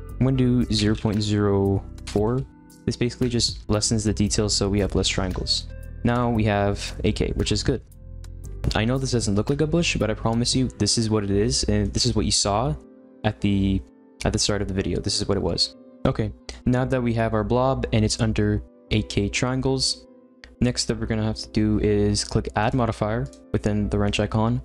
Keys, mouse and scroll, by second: 5.5-9.8 middle drag, 11.4-14.6 shift+middle drag, 15.7 click, 23.2 click, 24.0 click.